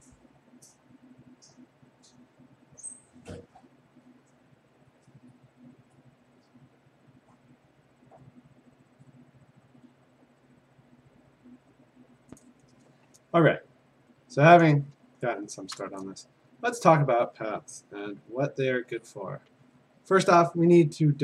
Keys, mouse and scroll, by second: 0.1 click, 0.6 click, 0.9 click, 1.4 click, 1.6 click, 2.6 click, 3.4 click, 4.2 click, 5.8 click, 6.7 click, 7.7 click, 9.0 click, 9.2 click, 9.7 click, 10.0 click, 10.5 click, 11.0 click, 11.3 click, 11.8 click, 12.2 click, 15.0-15.8 v, 15.8 click, 18.1 b, 19.1 click.